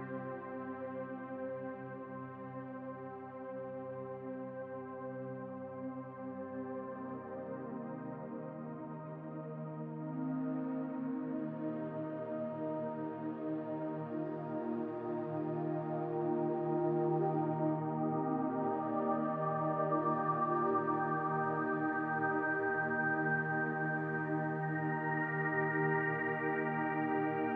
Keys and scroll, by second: 1.0 b, 2.5 s, 3.6 s, 4.6 s, 5.1 s, 7.2 s, 8.9 w, 9.9 q, 14.4 w, 14.7 f, 15.5 q, 15.8 s, 17.2 s, 18.2 s, 24.4 s, 25.4 s, 26.3 s, 27.3 s.